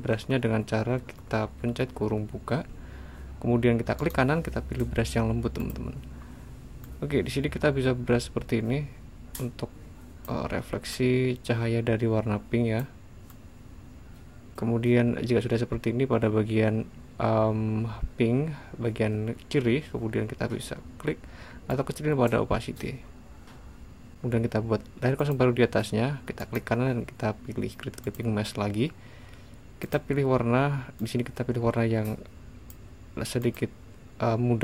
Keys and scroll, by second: 2.8 [.